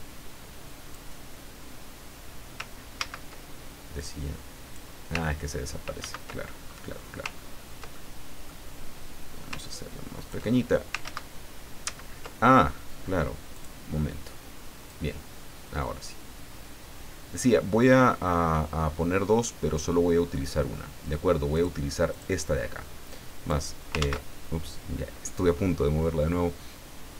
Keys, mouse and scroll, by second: 2.0-2.3 scroll down 2, 2.9 ctrl+z, 3.9-4.9 drag, 5.2-5.5 ctrl+scroll down 2, 6.0 ctrl+z, 6.5-6.8 ctrl+scroll up 3, 7.3-7.7 ctrl+scroll up 2, 7.9 ctrl+middle click, 9.5 ctrl+click, 11.0 ctrl+z, 11.8 ctrl+z, 13.5 click, 14.9-20.0 drag, 21.5 click, 22.1 click, 23.1-23.7 drag, 24.0 ctrl+z.